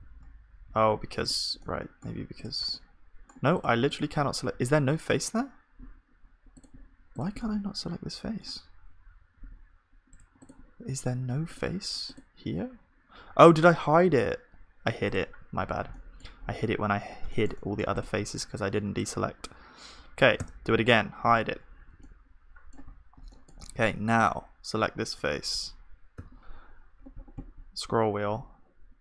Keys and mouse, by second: 0.1 z, 0.7 z, 1.6-5.3 drag, 1.6-5.3 right drag, 4.6 z, 7.4-9.4 drag, 7.4-9.4 right drag, 9.5 g, 13.8 click, 14.3 alt+h, 16.8 z, 17.1-18.7 middle drag, 18.7 b, 20.4 h, 21.2 z, 22.0-29.0 middle drag, 25.1-29.0 drag, 25.1 g.